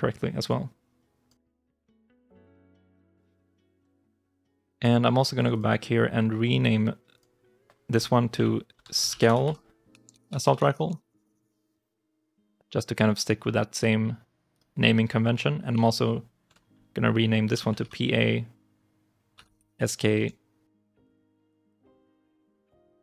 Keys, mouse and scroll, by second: 1.2 alt+right click, 1.5 alt+click, 2.3 alt+right click, 2.6 alt+click, 5.4 double click, 8.8 shift+s, 9.8 shift+a, 10.8 shift+r, 17.1-22.7 typing.